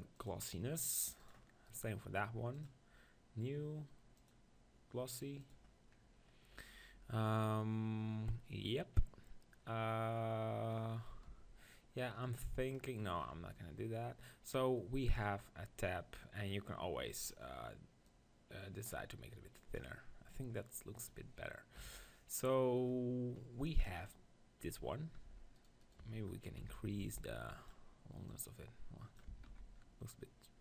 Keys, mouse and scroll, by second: 1.7-5.5 right drag, 6.0-8.3 middle drag, 9.6-11.8 middle drag, 11.3 KP_1, 12.1-13.9 middle drag, 15.2-18.6 right drag, 18.6-19.9 drag, 21.8 KP_1, 25.6-27.6 right drag, 26.0 Tab, 26.6 z, 27.0 b, 28.3-30.1 drag, 29.4 Tab, 29.5 z, 30.1-30.6 middle drag.